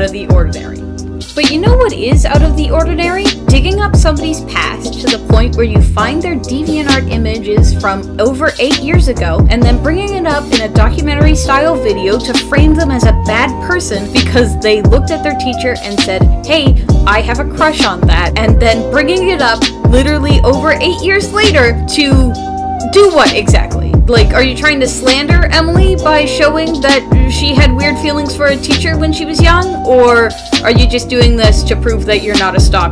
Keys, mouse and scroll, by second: 0.3 space, 0.6 ctrl+z, 3.3 ctrl+z, 3.7 ctrl+z, 4.0 ctrl+z, 4.6 space, 5.3 ctrl+z, 6.1 ctrl+z, 7.1 space, 17.5 space, 19.3 space, 19.7 space, 21.8-25.9 typing.